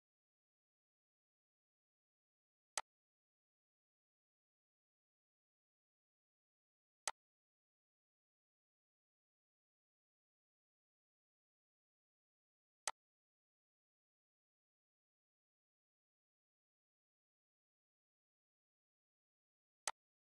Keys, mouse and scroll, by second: 1.4 typing, 3.0-7.1 drag, 7.1-12.3 shift+drag, 8.8 typing, 12.8-17.9 drag, 12.8 typing, 19.2 click, 19.9-20.3 alt+drag.